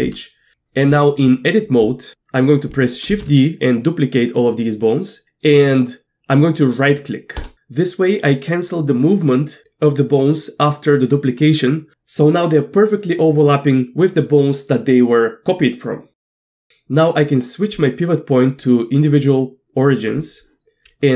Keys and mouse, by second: 3.1 shift+d, 17.7-20.3 drag.